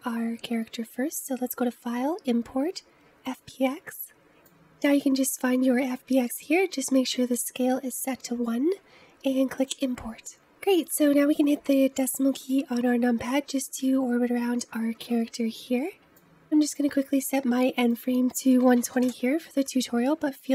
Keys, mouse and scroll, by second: 10.9 KP_Decimal, 11.9 scroll down 3, 12.3-14.4 middle drag, 14.4-15.1 scroll down 2, 15.1 middle click, 17.9-20.5 drag.